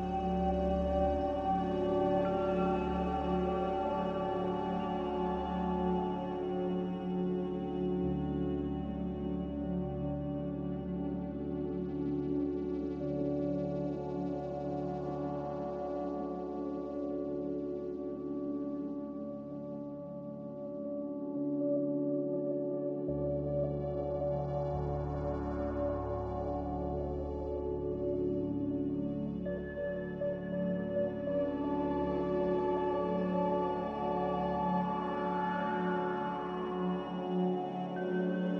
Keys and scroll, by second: 38.1 a.